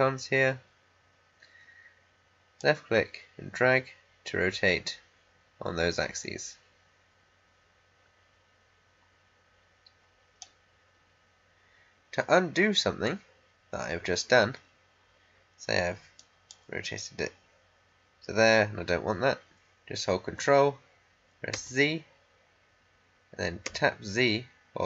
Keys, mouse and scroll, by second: 2.5-12.5 drag, 16.1-19.1 drag, 20.3-21.5 drag, 21.5 ctrl+z, 23.6 ctrl+z.